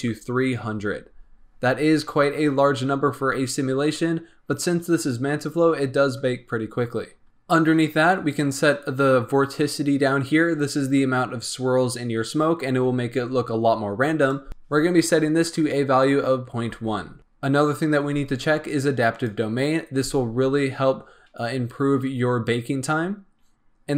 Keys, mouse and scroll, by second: 8.1-10.4 scroll down 6, 14.1-17.2 drag, 19.2 click.